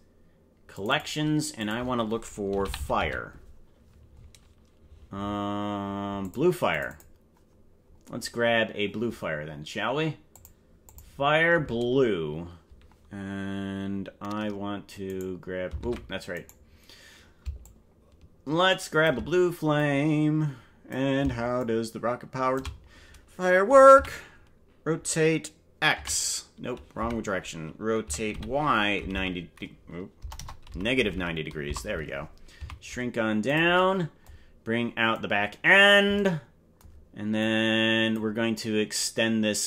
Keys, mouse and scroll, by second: 8.5 scroll down 4, 10.3 click, 10.8 click, 15.2 right click, 16.0 ctrl+Tab, 16.6 right click, 17.6-19.1 shift+drag, 19.7-21.0 drag, 21.6-22.6 shift+drag, 23.9 r, 28.1 r, 32.5 s, 35.1 click, 37.4 click.